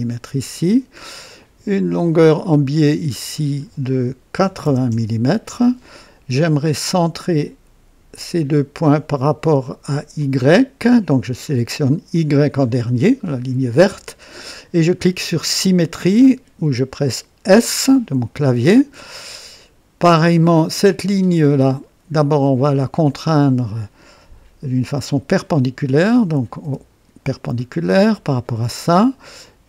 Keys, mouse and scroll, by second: 1.9 click, 3.2 click, 4.3 KP_8, 4.6 KP_0, 4.9 Return, 8.1 click, 10.2 click, 12.1 click, 17.5 s, 21.3 click, 23.1 click, 26.6 n, 27.6-28.4 right drag.